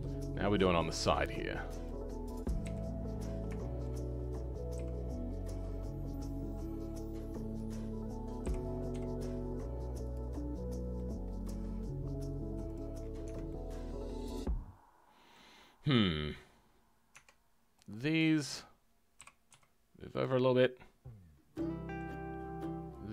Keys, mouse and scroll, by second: 0.2-1.8 middle drag, 1.8 click, 2.6 KP_1, 3.0-3.6 scroll up 5, 3.6-4.7 shift+middle drag, 4.7 g, 7.5 click, 8.4 g, 10.9 middle click, 11.7 scroll down 6, 12.6 click, 12.9 scroll down 6, 13.2 Tab, 13.4-15.5 middle drag, 15.5-16.0 scroll up 2, 16.0-17.1 middle drag, 17.1 Tab, 18.1 click, 19.2 g, 20.6-23.1 middle drag.